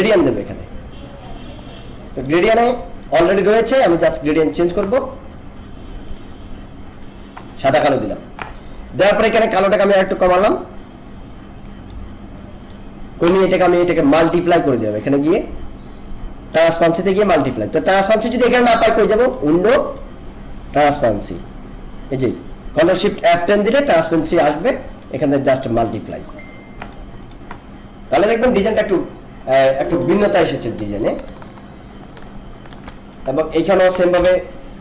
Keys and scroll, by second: 19.9 ctrl+F10, 28.5 ctrl+=, 29.6 alt+space, 34.1 BackSpace.